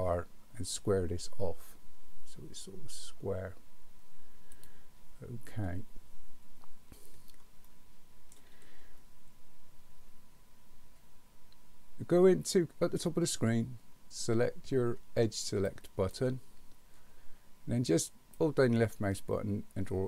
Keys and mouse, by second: 7.6 shift+middle click, 15.7 click, 18.5-20.0 drag.